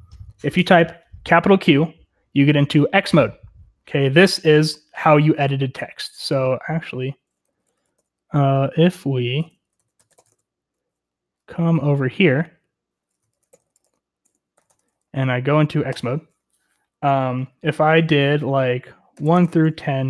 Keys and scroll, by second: 6.9 Escape, 7.2-8.0 typing, 8.3 ctrl+q, 9.7 Escape, 9.8-10.5 typing, 11.6 ctrl+d, 12.1-15.9 typing, 18.9-20.0 typing.